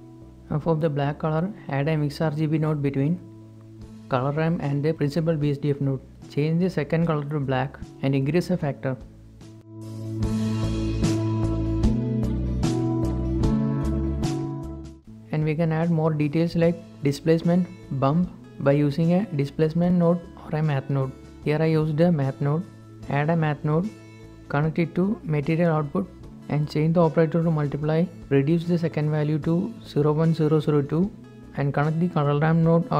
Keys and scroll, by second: 1.2 a, 13.3 shift+3, 13.6 Return, 18.6 shift+a, 27.3-29.3 typing, 28.9 Return.